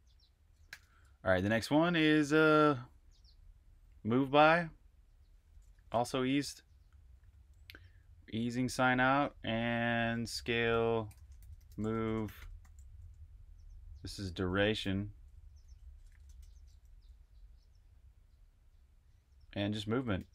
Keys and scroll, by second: 0.4-1.1 typing, 5.1-6.9 typing, 9.3-16.7 typing, 18.9-20.3 typing.